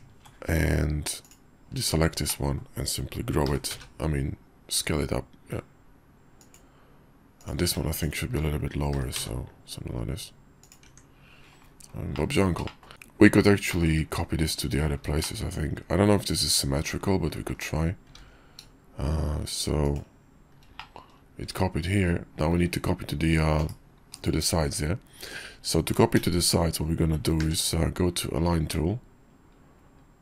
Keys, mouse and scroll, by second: 2.3 click, 3.4 g, 9.1 g, 10.8 Tab, 12.1 drag, 12.6 shift+drag, 13.7 click, 13.8 `, 14.5 Tab, 15.2 shift+middle drag, 17.5 KP_5, 18.1 alt+x, 20.8-21.2 drag, 24.7 `, 26.1 q, 27.4 ctrl+q.